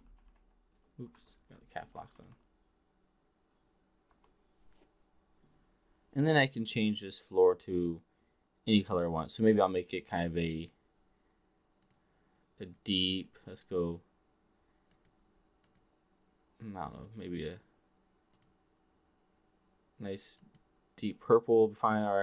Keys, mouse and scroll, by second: 0.4-2.3 typing, 8.9 click.